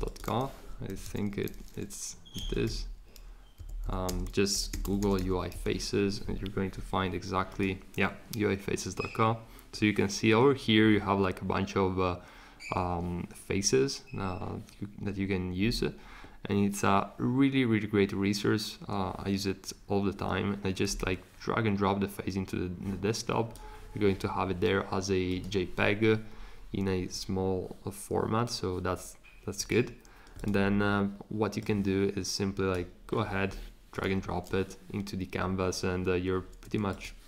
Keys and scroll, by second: 0.6-5.6 typing.